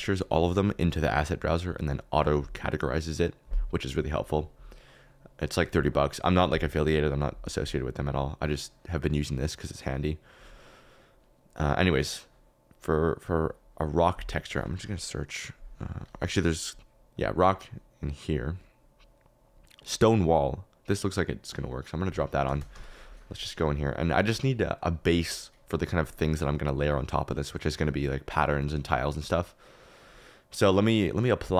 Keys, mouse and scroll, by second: 17.1 click, 22.1-22.8 typing, 26.1 click, 27.1-28.4 drag, 28.7 click, 29.2 middle click, 30.8 middle click.